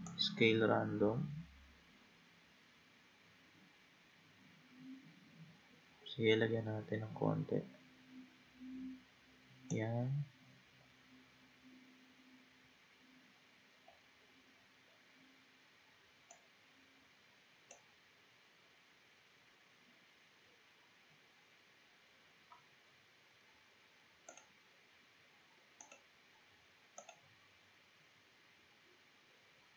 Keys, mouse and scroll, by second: 0.1-3.1 drag, 10.4-12.1 scroll down 5, 12.1 scroll down 3, 13.1-14.5 scroll down 4, 14.5-16.3 scroll down 2, 16.3-18.2 drag, 18.2-21.3 scroll down 2, 22.0-23.0 scroll down 2, 23.0-24.3 scroll down 3, 24.3-27.6 drag, 27.6-28.3 scroll down 3.